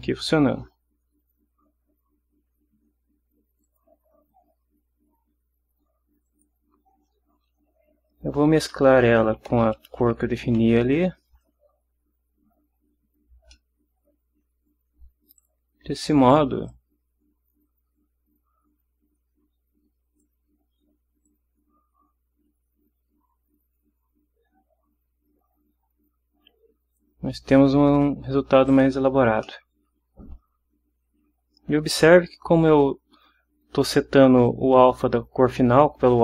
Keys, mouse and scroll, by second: 3.6 click, 6.2 click, 8.1 Left, 8.6-10.4 typing, 13.5-14.6 drag, 15.4 click, 16.7-20.4 drag, 21.2-27.2 drag, 28.6 click, 29.4 middle click, 34.4 click.